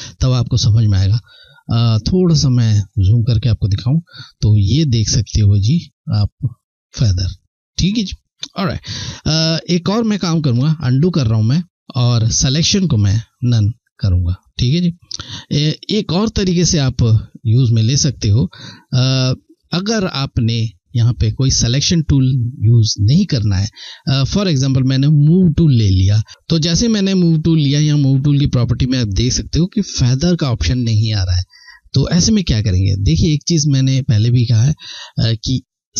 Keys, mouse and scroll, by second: 1.5 ctrl+scroll up 1, 3.3 ctrl+scroll down 1, 4.3 ctrl+scroll down 1, 4.9 ctrl+scroll up 1, 6.9-7.5 ctrl+scroll down 1, 7.6 ctrl+scroll down 1, 10.1 ctrl+z, 11.6 ctrl+z, 12.7 click, 15.0-15.4 ctrl+scroll down 1, 15.7-16.3 scroll up 1, 16.3 ctrl+scroll up 1, 17.4-18.0 ctrl+scroll down 1, 18.1 ctrl+scroll up 1, 24.9 click, 26.2 ctrl+scroll down 1.